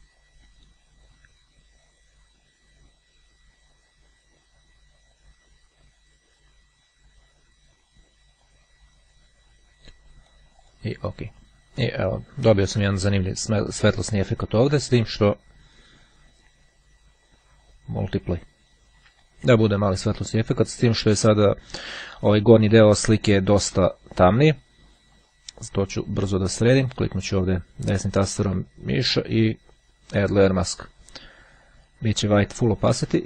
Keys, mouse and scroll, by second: 10.5 click, 16.8 click, 17.4 click, 25.8-27.9 right drag, 30.4 click.